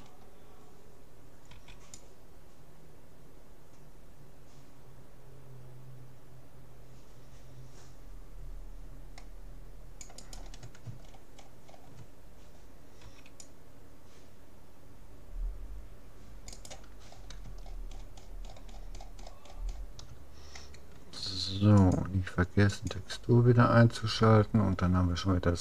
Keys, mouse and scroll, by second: 1.5 c, 10.3-11.9 right drag, 11.1-13.7 middle drag, 13.1 c, 16.7-18.3 right drag, 17.1-21.7 middle drag, 21.9-23.3 drag, 24.3-25.6 middle drag.